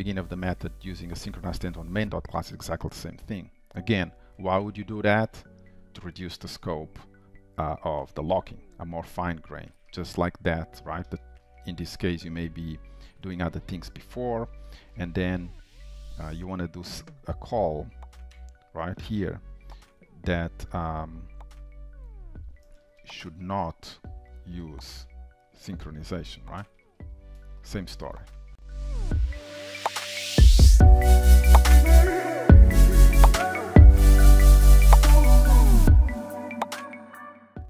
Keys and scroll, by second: 2.0 ctrl+s, 12.4 ctrl+c, 12.8 alt+Down, 13.7 ctrl+v, 16.4 ctrl+c, 21.7 ctrl+shift+Right, 26.0 Delete, 26.4 ctrl+s.